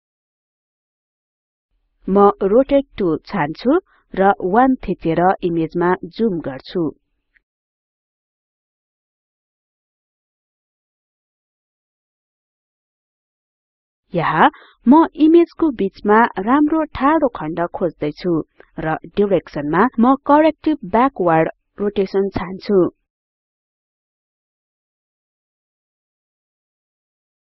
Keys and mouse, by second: 8.0 click, 18.0-19.5 drag, 21.0-24.0 drag.